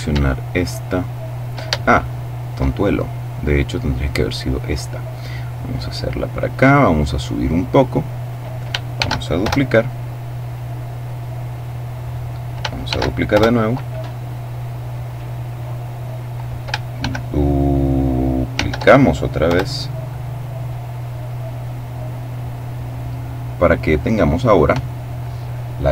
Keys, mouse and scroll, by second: 1.4-2.5 shift+middle drag, 3.0 right click, 3.6 right click, 5.2-8.3 drag, 8.6 shift+d, 8.9 shift+Return, 10.0-12.1 drag, 12.4 shift+d, 12.8 shift+Return, 13.8-16.4 drag, 16.5 shift+f, 18.1 d, 18.9 Return, 20.1-22.9 drag.